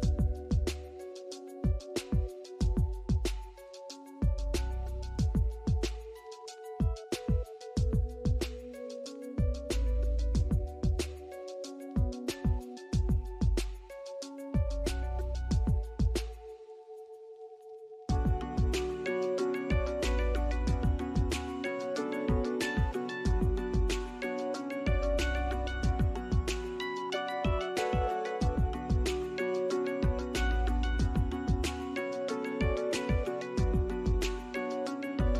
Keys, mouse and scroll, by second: 2.9 scroll up 1, 3.6 ctrl+z, 4.2 right click, 5.0 double click, 9.1 ctrl+z, 11.5 double click, 11.8 right click, 19.7 double click, 25.9 right click, 27.0 double click, 32.4 middle click, 33.1 scroll up 1, 33.4 alt+click, 34.2 middle click.